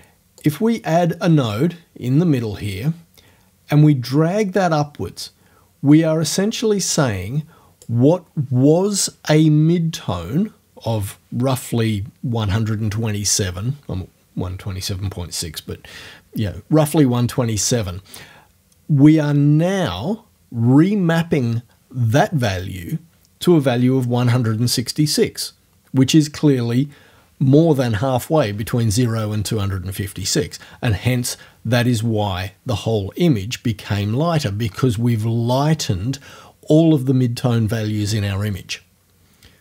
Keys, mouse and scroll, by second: 0.4-8.0 drag, 8.0-12.1 middle drag.